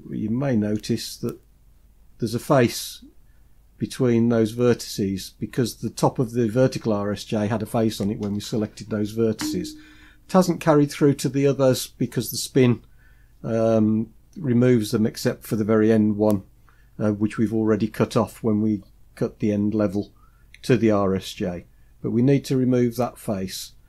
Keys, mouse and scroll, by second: 0.8-1.5 scroll up 2, 1.5-1.9 scroll down 1.